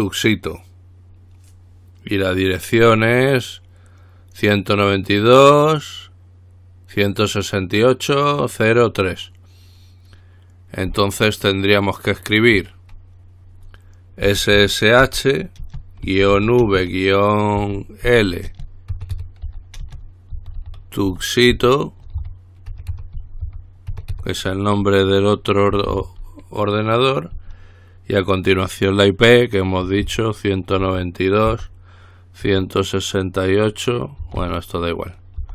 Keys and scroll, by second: 14.4-16.6 typing, 17.8-18.3 typing, 19.3-24.3 typing, 25.7-26.6 typing, 29.8-32.7 typing, 34.2-35.5 typing.